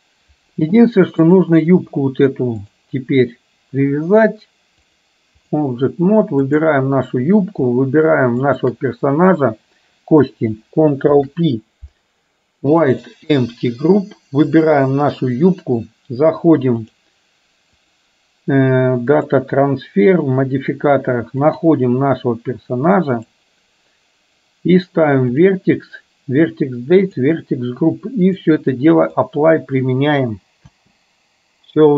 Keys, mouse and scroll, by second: 1.4 click, 2.6 click, 5.1 click, 6.6 click, 8.5 shift+click, 11.1 ctrl+p, 14.8 click, 16.9 click, 17.9-19.4 drag, 21.6 click, 24.9 click, 25.4 click, 27.1 click, 28.5 click, 30.9 space.